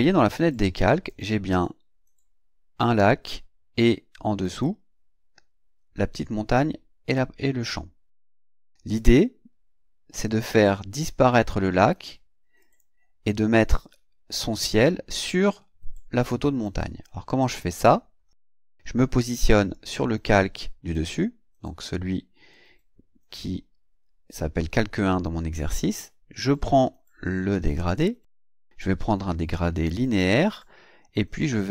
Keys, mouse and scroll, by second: 0.5-1.3 drag, 4.4 click, 9.0 click, 12.6 click, 17.7 click, 19.7 click, 27.5 click, 29.8 click, 31.6 click.